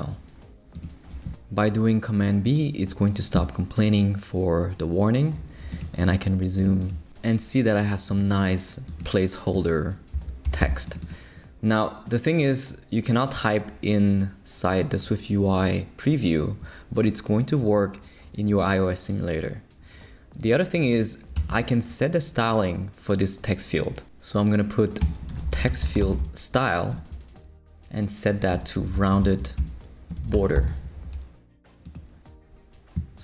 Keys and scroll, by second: 9.9-11.1 typing, 21.3 Return, 21.5 Tab, 25.0-26.7 typing, 26.9 Return, 28.5-30.8 typing.